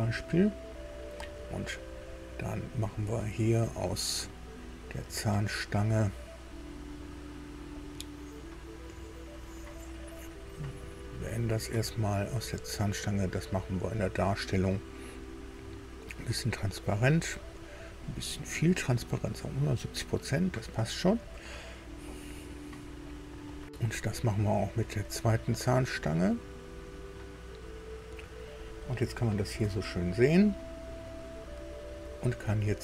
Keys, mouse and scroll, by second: 2.9-3.3 scroll up 1, 4.3 click, 7.7 right click, 9.6 Escape, 10.8 click, 12.3 right click, 13.8 click, 16.3 click, 18.0-19.8 drag, 22.6 click, 24.8 click, 26.4-28.4 drag, 28.7-29.1 scroll up 1, 29.7 shift+middle click, 30.5 shift+scroll up 2, 31.1 click.